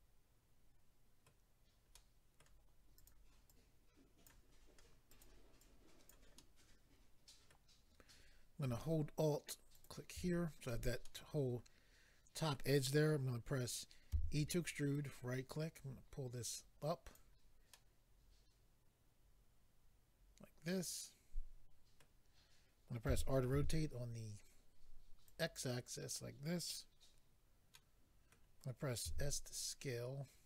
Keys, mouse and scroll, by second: 1.9 middle click, 3.0 click, 3.5 click, 5.1 click, 5.2 click, 6.1 click, 6.4 middle click, 9.7 alt+click, 11.0 middle click, 14.8 right click, 14.8 e, 14.9 right click, 15.7 click, 17.7 middle click, 23.1 r, 24.9 typing, 25.2 click, 25.4 click, 27.7 middle click, 29.0 s.